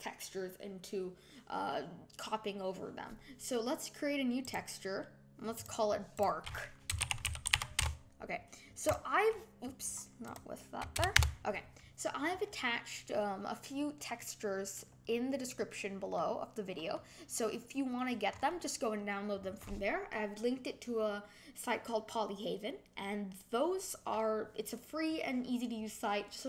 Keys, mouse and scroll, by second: 4.4-5.6 drag, 6.1-11.8 drag, 14.1-18.3 middle drag, 18.3-19.3 scroll up 3, 19.3 scroll down 3.